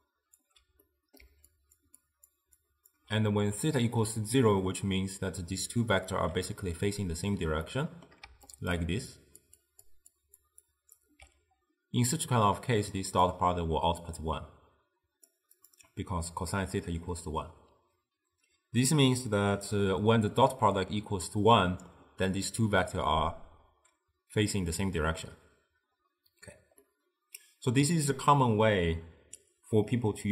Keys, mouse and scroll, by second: 0.0-3.0 typing, 0.9-1.3 middle drag, 1.6 click, 2.1 click, 2.7 click, 5.9 d, 7.7-8.3 shift+middle drag, 8.3-11.1 typing, 8.6 click, 9.2 click, 9.7 click, 10.2 click, 10.7 click, 13.3 drag, 26.9-30.0 middle drag.